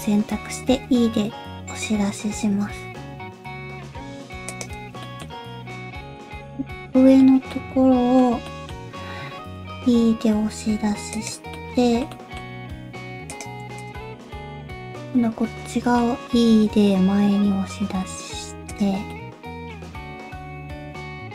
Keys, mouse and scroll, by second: 0.3 middle click, 0.7 e, 5.0 shift+middle click, 5.2-5.9 scroll up 3, 5.7 middle click, 6.2 shift+click, 6.5 middle click, 7.4 scroll up 1, 7.5 middle click, 8.4 middle click, 9.4 e.